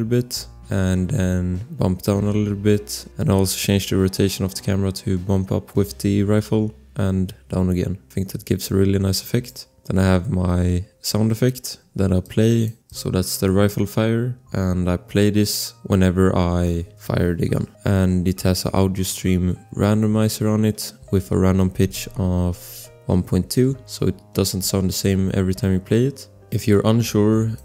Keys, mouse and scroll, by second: 12.2 click, 16.0 click, 26.2 scroll, 27.0 click.